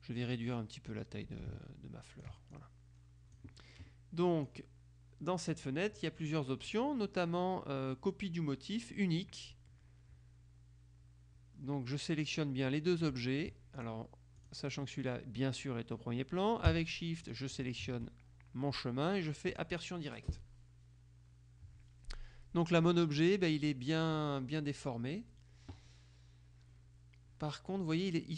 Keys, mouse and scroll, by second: 0.4-2.8 drag, 4.6-6.1 drag, 13.9 shift+click, 17.4 shift+click, 19.6 click.